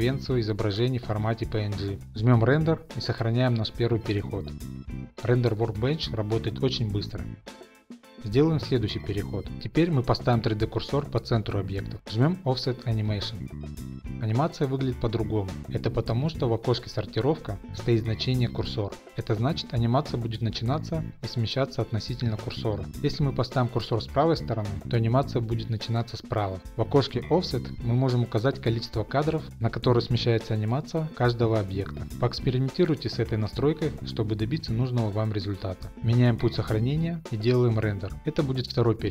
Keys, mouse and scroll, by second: 4.0 click, 5.2 click, 8.1 click, 8.4 Left, 8.4 middle click, 9.0 shift+middle click, 10.3 shift+right click, 12.1 click, 12.3 middle click, 14.2 middle click, 18.0 click, 22.6 shift+Left, 22.9 shift+right click, 23.6 click, 27.5 click, 28.0 2, 28.1 Return, 29.4 click, 36.4 click, 37.6 click, 37.7 click, 38.6 click, 38.8 click.